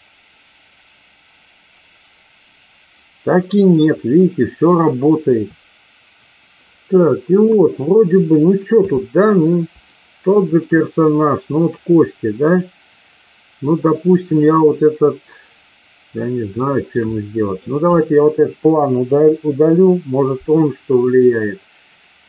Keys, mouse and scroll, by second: 7.6 KP_1, 8.7 KP_3, 10.0 shift+middle click, 14.2 click, 16.7-17.8 shift+middle drag, 18.0 click, 19.2 Delete.